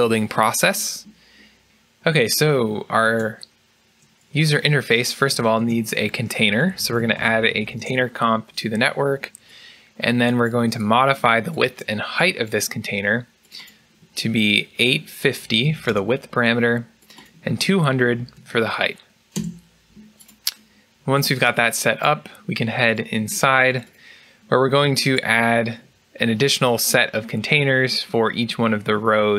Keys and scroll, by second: 5.1 Tab, 7.7 shift+Tab, 7.7 Return, 7.7 typing, 11.1 Escape, 15.1-15.8 typing, 17.7-19.2 typing, 19.2 Return.